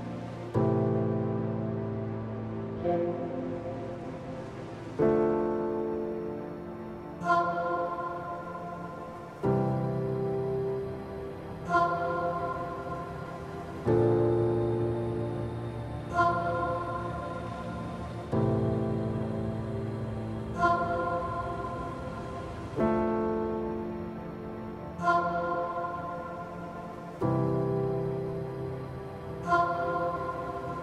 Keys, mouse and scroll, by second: 0.5 click, 2.3 s, 8.7 ctrl+r, 11.6 middle click, 14.9 middle click.